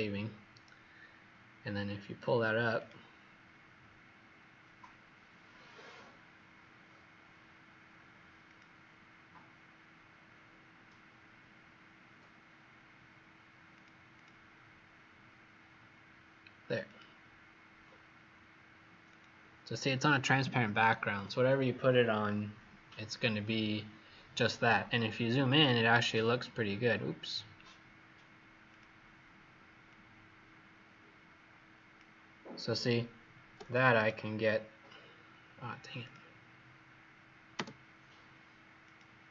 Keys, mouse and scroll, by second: 14.1 click, 16.6 click, 16.8 click, 19.0 click, 25.8-26.7 scroll up 3, 26.7 scroll down 1, 26.8-28.5 scroll down 2, 28.6 click, 33.6 click, 35.9 click, 38.8 click.